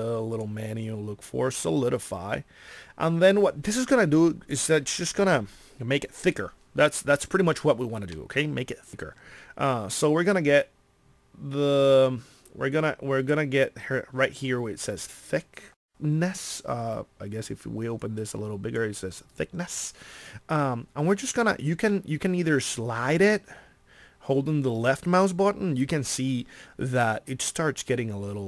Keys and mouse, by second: 8.1 middle click.